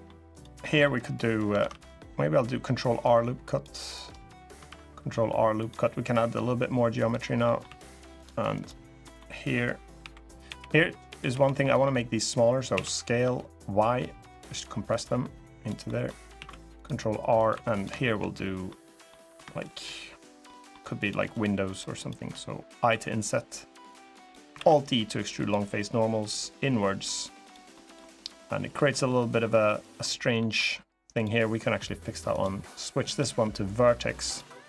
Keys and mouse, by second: 0.0 click, 0.3 middle click, 1.3 ctrl+r, 6.7 click, 7.2 middle click, 7.4 3, 7.9 click, 8.3 click, 8.8 click, 9.7 l, 10.2 l, 10.8 l, 11.0 l, 11.3 click, 12.5 s, 13.0 y, 14.0 click, 14.7 click, 15.6 middle click, 16.1 ctrl+r, 17.1 click, 17.3 3, 17.5 click, 18.4 middle click, 18.6 click, 20.2 click, 20.8 click, 21.0 shift+click, 22.5 i, 23.9 click, 24.3 alt+e, 27.1 click, 27.5 click, 29.4 click, 30.1 middle click, 30.8 click, 32.0-33.4 drag, 34.0 click, 34.4 middle click.